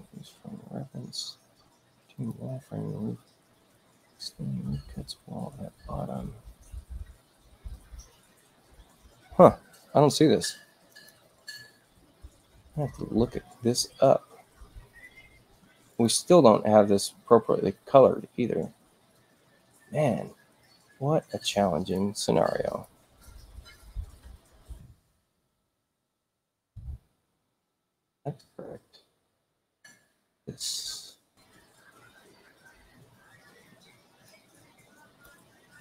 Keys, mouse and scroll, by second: 2.1 click, 10.8 click, 15.9 click, 21.9 click, 22.7 click, 24.7 shift+i, 25.8 shift+u, 26.3 shift+i, 27.3 shift+u, 28.4 click, 34.2 click.